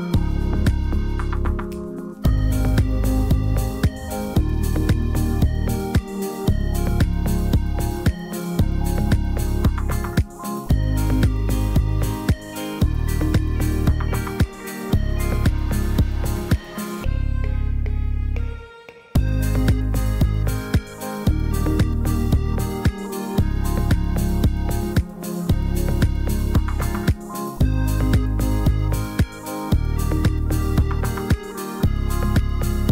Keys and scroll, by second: 1.2 \, 10.2 l, 16.8 Delete, 20.1 Delete, 25.0 \, 28.3 h, 29.9 Delete.